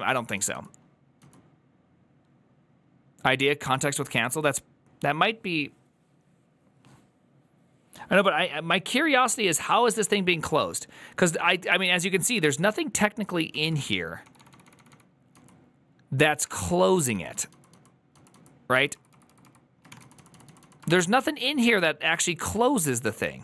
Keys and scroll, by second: 3.1 j, 11.5 ctrl+u, 11.5-22.9 typing, 11.7 ctrl+u.